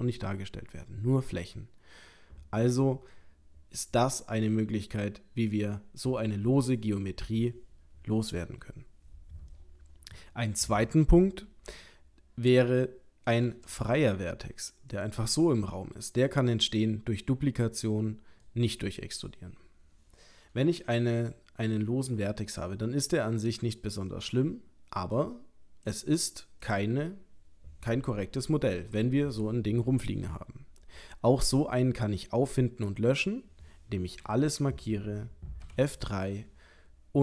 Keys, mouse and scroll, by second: 9.5 middle click, 11.8 middle click, 13.5 shift+d, 15.5 middle click, 20.6-21.2 scroll up 1, 21.2 click, 21.2-21.7 scroll up 1, 21.7 middle click, 25.2 click, 26.6 click, 32.2-32.9 scroll down 2, 32.9 middle click, 33.2 middle click, 34.3 a, 35.6 F3.